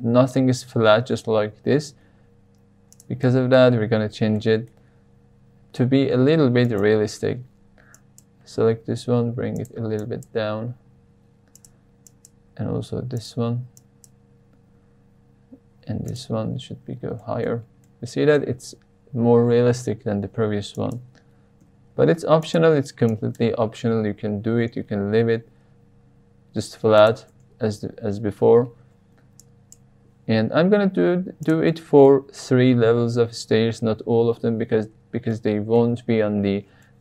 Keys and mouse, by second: 1.5 g, 1.8 z, 2.9 click, 3.2 shift+middle click, 4.3 shift+middle click, 6.1 click, 8.0 click, 8.7 g, 9.0 z, 9.5 drag, 10.1 click, 10.8 g, 11.5 drag, 12.0 click, 12.4 g, 12.5 z, 13.1 click, 13.9 click, 14.6 g, 14.7 z, 16.0 drag, 17.1 middle click, 17.5 Tab, 17.8-18.4 middle drag, 19.7 Tab, 20.8 drag, 21.5 g, 21.9 z, 22.4 drag, 23.0 drag, 23.8 g, 23.9 z, 26.9 click, 27.3 Tab, 28.8 Tab, 29.5 click, 30.3 g, 30.6 z, 31.4 click, 31.7 middle click, 35.3-35.8 shift+middle drag, 36.8 shift+middle click.